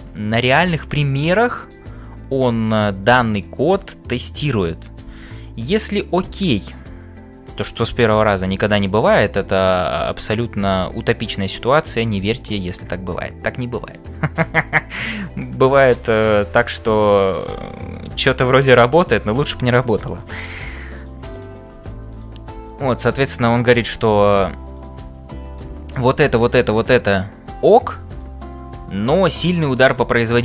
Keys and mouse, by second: 0.7-1.8 middle drag, 2.4 click, 5.0 f, 6.4 middle click, 9.9 click, 10.6 f, 12.3 f, 13.9 click, 15.7-18.0 ctrl+z, 20.4 g, 21.4 click, 21.8 g, 23.8 f, 24.7 click, 25.4 middle click, 29.9 click, 30.3 g.